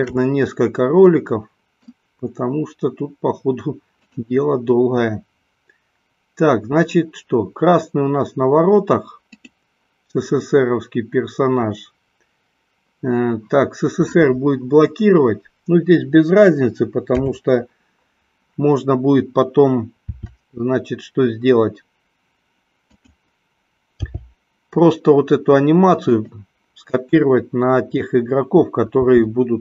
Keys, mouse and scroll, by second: 1.0-1.9 middle drag, 10.0-11.0 drag, 17.2 KP_7, 20.3 r, 23.5 click, 24.3 g, 26.4 click, 29.2 r.